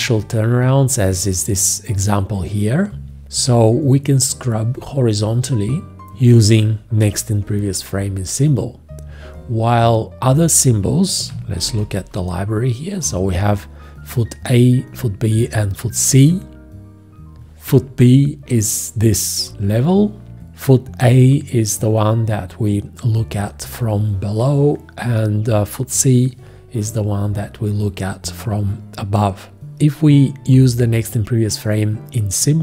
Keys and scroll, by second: 11.6 ctrl+i.